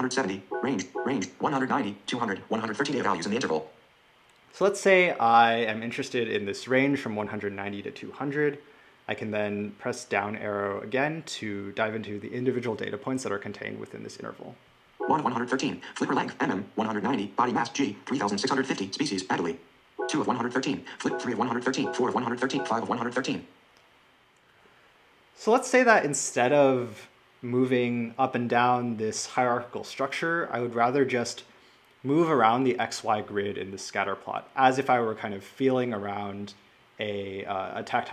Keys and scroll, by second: 0.2 Right, 14.7 Down, 19.7 Right, 20.8 Right.